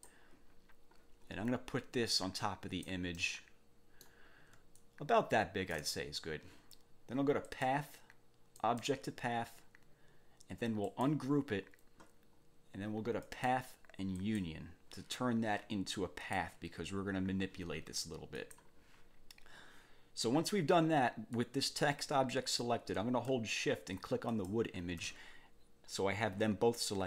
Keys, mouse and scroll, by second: 1.2-1.5 scroll up 2, 2.1 click, 3.1-4.2 drag, 4.7-5.9 ctrl+shift+drag, 7.5 click, 8.5 click, 10.9 click, 13.3 click, 14.1 click, 16.2 click, 18.3 click, 21.3 click, 24.3 shift+click.